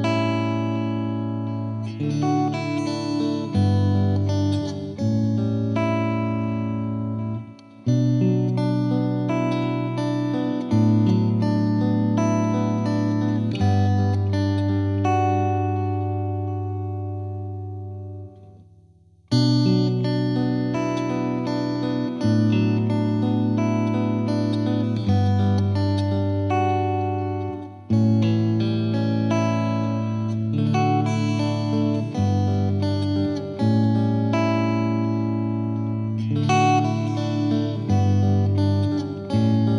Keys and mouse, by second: 1.4-2.6 drag, 5.7 click, 6.6 click, 7.3 click, 10.7 click, 14.0-15.3 drag, 16.1-17.2 drag, 19.5 Page_Up, 23.7-24.9 drag, 25.7-26.8 drag, 27.0-28.1 drag, 28.5 click, 31.6-32.6 drag, 34.2 click, 35.2 shift+click, 37.3 c, 37.9 click, 39.2 click.